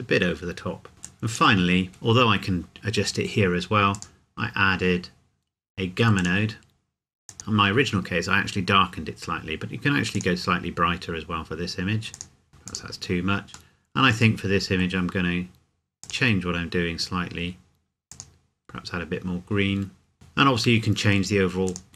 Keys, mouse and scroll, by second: 0.9 middle click, 1.0 click, 3.9 click, 8.8-9.7 scroll up 1, 10.1 click, 12.7 click, 13.7 middle click, 16.0 click, 21.7 click.